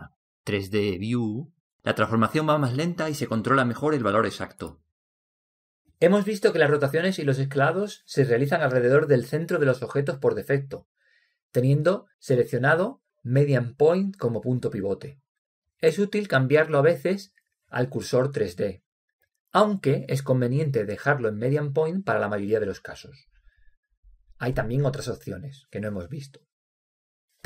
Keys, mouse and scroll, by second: 2.8 g, 15.1-16.9 drag, 21.0-22.9 drag, 22.2 r, 24.6-25.5 drag.